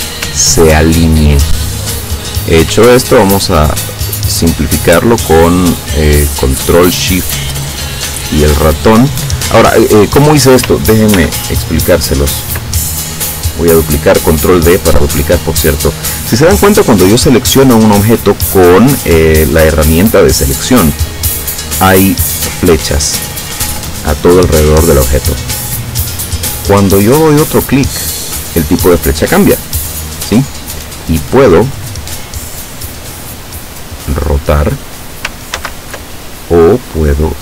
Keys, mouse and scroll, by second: 0.6 ctrl+scroll down 2, 2.1 click, 3.3-9.4 ctrl+shift+drag, 11.2 ctrl+d, 11.7-12.8 ctrl+drag, 13.5 click, 29.3 click, 34.1 click, 35.6 ctrl+z.